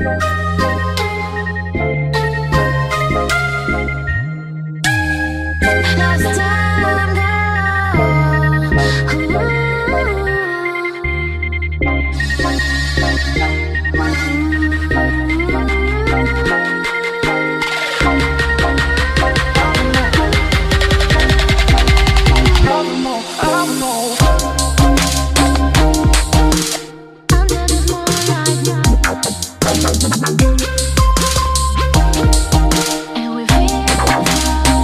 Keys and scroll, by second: 0.6 ctrl+a, 6.0-6.4 typing, 7.0 ctrl+a, 14.9 ctrl+c, 16.3 ctrl+v.